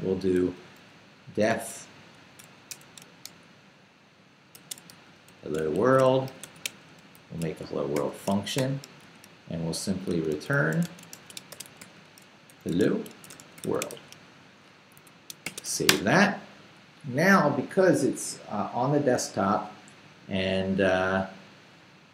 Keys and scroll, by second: 0.4-2.7 typing, 4.3-7.9 typing, 8.6 shift+Return, 9.1 Tab, 9.7-16.1 typing, 15.0 shift+Escape.